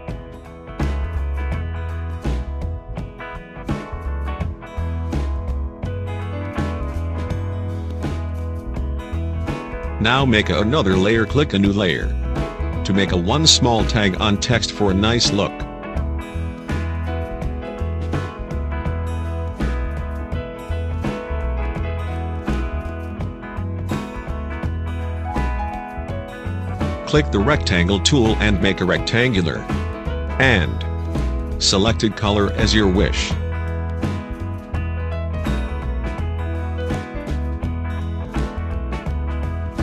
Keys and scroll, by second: 2.9 space, 16.5-17.9 typing, 18.0 Return, 22.0 space.